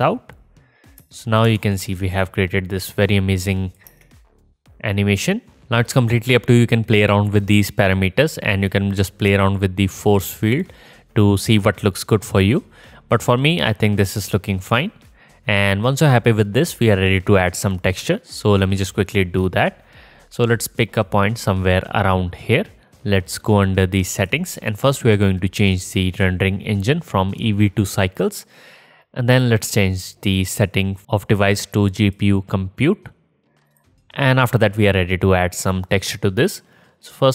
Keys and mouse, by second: 1.1 space, 1.5 KP_0, 1.7-2.2 drag, 2.3-2.6 drag, 2.7-3.4 drag, 3.5-5.3 drag, 3.9-4.7 middle drag, 3.9-4.7 right drag, 3.9 space, 8.2-10.1 middle drag, 10.5 middle click, 11.8 drag, 12.4 middle drag, 12.6-15.0 drag, 17.7-24.4 drag, 26.2-33.8 drag.